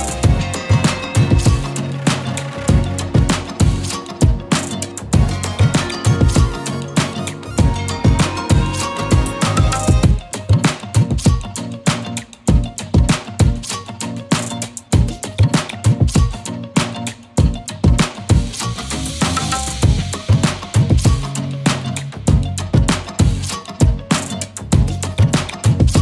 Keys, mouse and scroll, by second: 5.9 space, 6.2 click, 6.5-6.9 space, 7.9-11.3 drag, 11.6 z, 11.7 click, 12.0 space, 12.1 click, 16.4 scroll down 1, 16.7-19.2 typing, 17.1 click, 17.5 click, 17.9 click, 18.3 click, 18.7-19.6 click, 19.3 click, 23.3-24.5 typing.